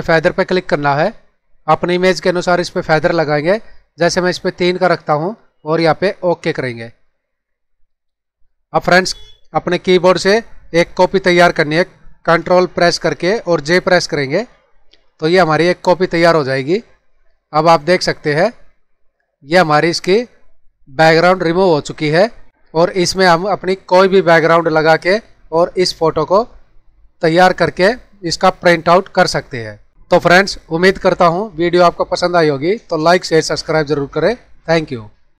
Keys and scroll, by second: 14.2 ctrl+j.